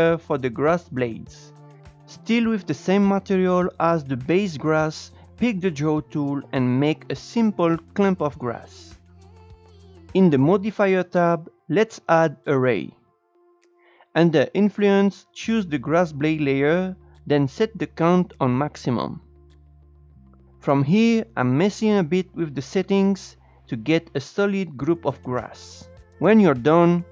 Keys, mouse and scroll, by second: 1.7 s, 1.7-2.4 scroll down 4, 2.4 click, 2.7-4.1 scroll up 5, 4.2-5.3 shift+drag, 5.4 shift+click, 6.0 shift+click, 6.7 shift+middle click, 6.9 shift+click, 7.3 scroll down 2, 7.4 scroll up 2, 7.5 Tab, 7.8 click, 7.8 Tab, 8.0 click, 8.4 Tab, 8.6 Tab, 9.0-9.3 drag, 10.6-13.1 drag, 15.1-21.5 drag, 21.5 scroll down 2, 21.8-23.2 drag, 23.6-24.7 drag, 24.8 click, 25.6-26.9 drag.